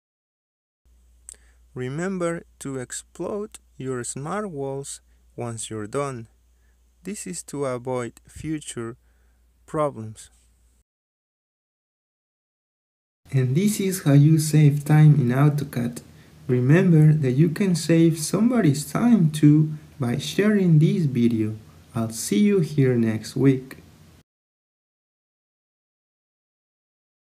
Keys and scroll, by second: 1.3 Return, 4.7 Escape, 6.2 x, 7.6 Return, 11.6 Escape.